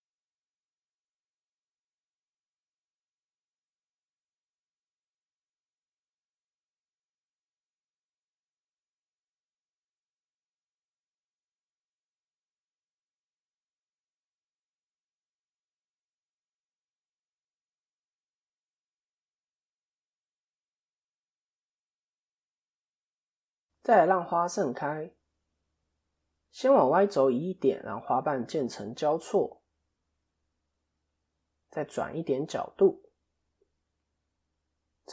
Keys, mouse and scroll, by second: 0.7 r, 3.3 click, 6.4 KP_7, 7.2 KP_1, 8.9 click, 11.0 ctrl+KP_7, 13.5 KP_7, 14.5 ctrl+KP_3, 16.3 KP_7, 19.8 click, 22.5 KP_3, 23.3 a, 26.0 click, 27.7 click, 35.0 middle click.